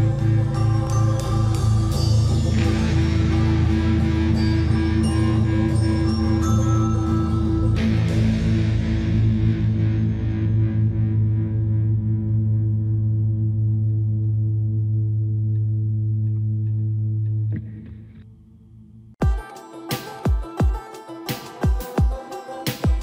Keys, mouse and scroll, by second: 0.7-3.9 typing, 2.2 click, 4.0 click, 4.8 Escape, 5.1-5.4 typing, 5.9 click, 6.7 shift+-, 7.9-11.2 typing, 9.1-9.5 scroll up 1, 9.9 click, 11.4 Return, 11.8 scroll down 1, 12.2 shift+middle click, 12.9 scroll down 1, 13.3 scroll up 1, 13.8-15.1 typing, 15.7-16.2 scroll up 1, 16.8 scroll down 1, 17.1-18.4 shift+middle drag, 18.6 scroll up 1, 19.1 middle click.